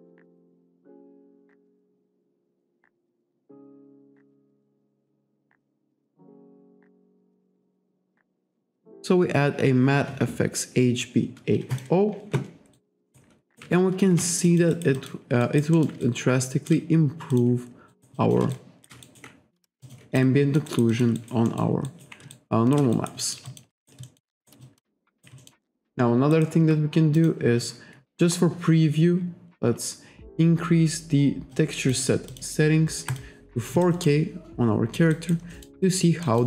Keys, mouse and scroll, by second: 0.9 click, 11.8 click, 12.8 alt+right click, 13.5 alt+right click, 13.8 shift+right click, 14.5 alt+click, 15.5 alt+right click, 15.8 alt+middle click, 16.1 shift+right click, 17.4 click, 17.9 alt+right click, 18.2 alt+click, 18.6 shift+right click, 19.1 alt+right click, 19.9 click, 20.3 alt+click, 20.7 alt+right click, 21.0 alt+click, 21.5 alt+middle click, 21.9 alt+right click, 22.4 shift+right click, 23.0 alt+right click, 23.5 alt+shift+click, 23.8 alt+right click, 24.1 alt+middle click, 24.4 alt+right click, 25.1 alt+right click, 26.4 alt+right click, 27.2 click, 28.0-28.4 scroll up 1, 28.4-28.7 scroll down 1, 29.0-29.6 scroll down 1, 29.6-30.0 scroll up 1, 30.3-30.7 scroll up 1, 31.6 click, 32.3 click, 33.1 click, 33.9 alt+right click, 35.2 alt+right click, 35.6 alt+middle click, 35.9 alt+right click, 36.3 alt+middle click.